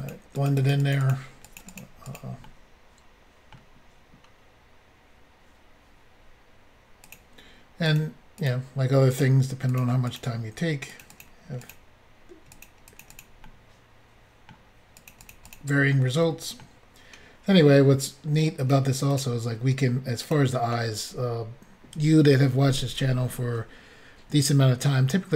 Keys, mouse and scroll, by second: 0.1 double click, 0.3 double click, 0.5 double click, 0.6 double click, 0.7 double click, 0.8 double click, 0.9 double click, 1.0 double click, 1.1 double click, 1.5 double click, 1.6 double click, 1.7 double click, 1.8 double click, 2.1 double click, 2.1 double click, 2.4 middle click, 7.1 click, 7.2 click, 7.9 click, 8.0 click, 8.4 click, 8.5 click, 9.2 click, 9.2 click, 9.7 click, 9.8 click, 10.1 click, 10.2 double click, 10.9 double click, 11.0 double click, 11.1 double click, 11.2 double click, 11.7 double click, 11.7 double click, 12.6 double click, 12.7 double click, 12.9 click, 13.0 click, 13.1 click, 13.5 middle click, 14.3 scroll up 1, 14.5 middle click, 15.0 click, 15.1 click, 15.2 click, 15.3 double click, 15.5 double click, 15.5 double click, 15.9 middle click, 18.6 click, 18.7 click, 19.1 click, 19.2 double click, 20.2 double click.